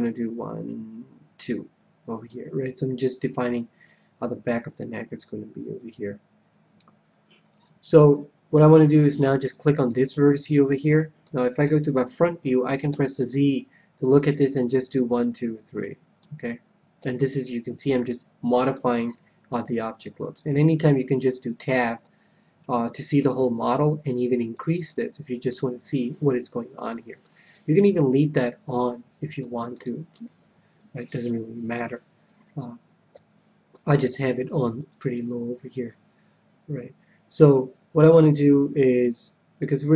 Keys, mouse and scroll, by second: 7.4-9.5 middle drag, 9.0-10.8 right drag, 9.8-11.5 middle drag, 11.5 KP_1, 12.8 z, 14.7-16.3 drag, 16.9 z, 17.2-21.1 middle drag, 21.1 Tab, 21.9-23.6 middle drag, 24.5-26.1 drag, 25.4-27.0 middle drag, 27.2 middle click, 27.6 Tab, 28.3-31.4 middle drag, 30.3 KP_3, 31.8 KP_1, 32.1-34.2 middle drag, 33.0 KP_3, 34.5-36.7 drag.